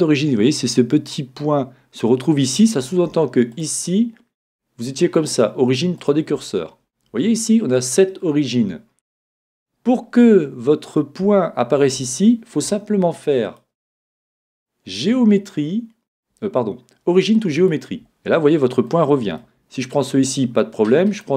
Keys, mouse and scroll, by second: 3.5-5.4 drag, 13.4-15.2 drag, 18.9-20.6 middle drag, 19.8-21.3 right drag.